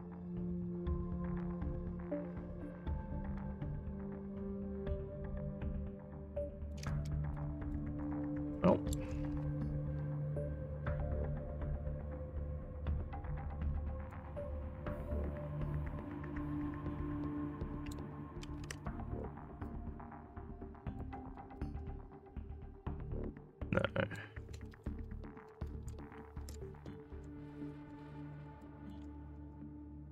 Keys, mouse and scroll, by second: 8.2 alt+middle click, 8.5 alt+middle click, 14.1-17.9 ctrl+drag, 19.7-21.0 ctrl+drag, 21.6-24.2 alt+drag, 24.7 ctrl+z, 25.7 ctrl+z, 28.3 alt+scroll up 1, 28.6 alt+middle click.